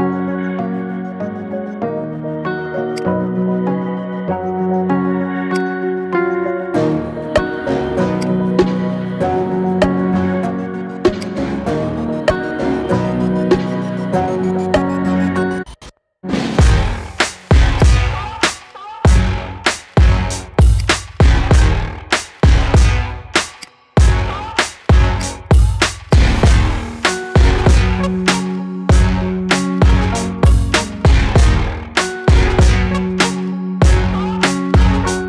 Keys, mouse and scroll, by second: 0.7-1.0 scroll down 2, 1.0-3.0 middle drag, 3.0 click, 3.3-3.6 scroll up 2, 3.6-5.6 middle drag, 5.6 click, 6.7 g, 12.0 KP_1, 13.0 g, 19.7-21.0 scroll down 1, 21.0 click, 21.5-22.0 scroll up 2, 22.0-23.7 middle drag, 23.7 drag, 24.5 g, 25.7-26.2 middle drag, 26.2 click, 26.5-26.8 scroll down 2, 26.8 middle click, 27.5 KP_1, 28.0-28.4 scroll up 2, 28.4 drag, 28.6-29.0 scroll down 2, 29.0-33.7 shift+middle drag.